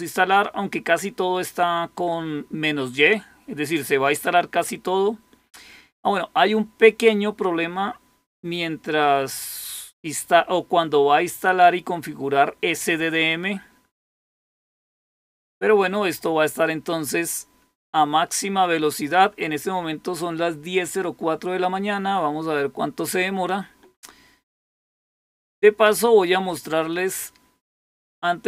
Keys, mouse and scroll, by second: 26.4 click.